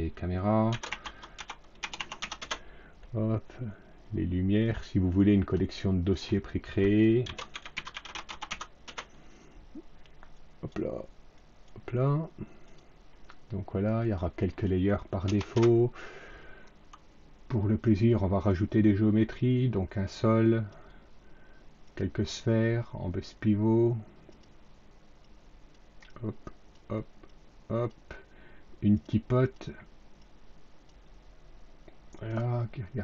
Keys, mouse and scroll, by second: 0.4-2.7 typing, 4.6 click, 6.9-8.9 typing, 10.2 click, 11.3 drag, 12.6 click, 13.1 click, 13.9 click, 15.2 BackSpace, 15.4 Return, 17.8 click, 19.3-20.6 drag, 21.8 click, 24.2 click, 25.1 click, 26.0 click, 27.2 click, 28.8 click, 29.4 click, 30.1 click, 32.1 click.